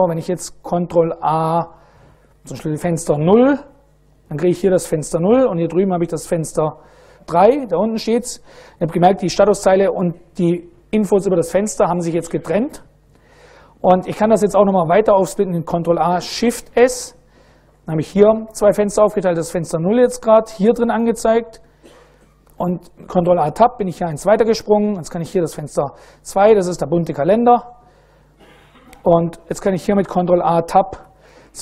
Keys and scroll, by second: 1.3 ctrl+a, 3.4 0, 15.4 ctrl+a, 16.4 shift+s, 21.6 ctrl+a, 22.2 Tab, 24.9 ctrl+a, 26.2 2, 29.2 ctrl+a, 29.4 Tab, 29.6 ctrl+a, 30.2 Tab, 30.4 ctrl+a, 30.6 Tab.